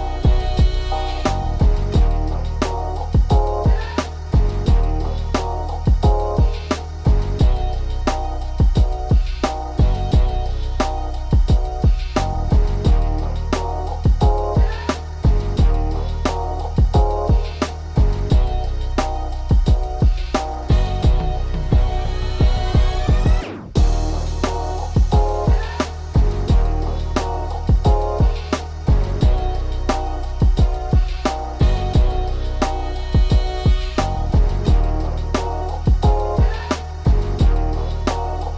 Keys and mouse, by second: 38.0 click.